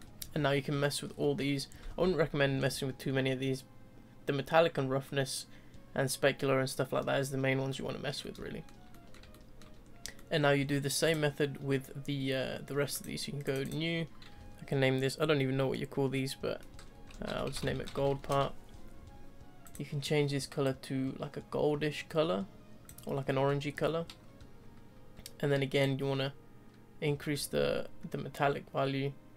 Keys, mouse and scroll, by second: 8.0 scroll down 1, 8.2-9.8 middle drag, 9.8 scroll up 2, 10.1-10.6 middle drag, 10.6 scroll up 2, 11.1 click, 13.0-13.5 drag, 13.6 click, 20.4 click, 23.2-23.7 middle drag, 23.7-25.9 scroll up 1, 25.9-29.3 drag.